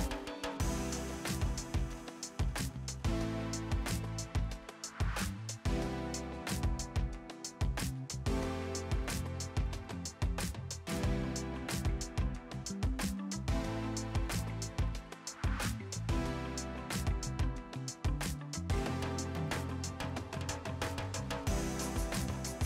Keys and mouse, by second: 0.7 right click, 0.9 click, 3.5 Delete, 4.1 click, 5.2 Escape, 5.4 click, 5.7 Escape, 5.9 click, 9.4 click, 10.3 click, 10.5 Escape, 10.5 click, 14.9 Escape, 15.8 click, 17.7 click, 21.5 KP_3, 21.8 Return.